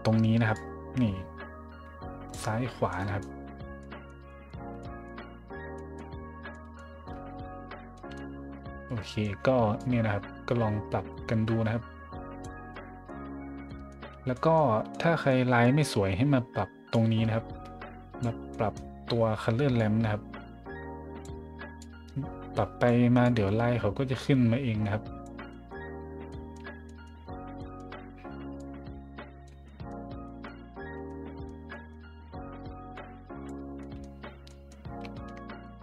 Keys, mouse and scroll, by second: 0.5-2.3 drag, 2.9 middle drag, 3.8 middle drag, 4.3 middle drag, 4.8 middle drag, 5.7 middle drag, 6.5 middle drag, 7.9 middle click, 9.1 middle click, 9.8-12.4 drag, 12.7-13.1 middle drag, 13.7 middle drag, 14.3 middle drag, 14.9-15.2 middle drag, 15.6 middle click, 16.3 middle click, 16.9-18.2 drag, 18.5 middle drag, 19.8-21.2 drag, 21.8-22.9 drag, 23.2-25.2 drag, 25.5 middle click, 26.1 middle click, 26.3 middle drag, 26.5-27.0 scroll up 2, 27.6-28.2 scroll up 2, 28.6-29.4 drag, 29.6 middle drag, 30.2 middle drag, 31.1-31.4 middle drag, 31.7 middle drag, 32.9 click, 33.8 middle drag, 34.4 middle drag, 35.1 shift+middle drag, 35.4 middle click.